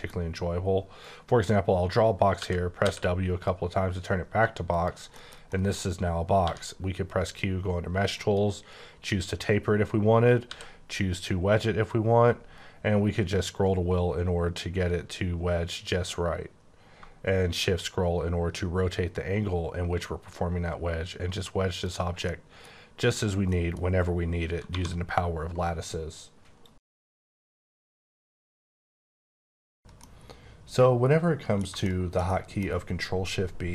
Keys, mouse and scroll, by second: 1.0 click, 2.4-2.8 typing, 4.7 shift+click, 5.3 shift+middle click, 6.4 q, 8.1 click, 10.5 w, 13.1-13.9 scroll up 2, 13.9-14.4 scroll up 2, 14.4-15.3 scroll up 3, 15.3-16.8 scroll down 1, 17.2 scroll up 2, 17.9-18.6 shift+scroll down 1, 18.6-19.7 scroll down 1, 21.8 click, 22.3 middle click, 23.5 middle click, 24.7 1, 31.8 shift+middle click.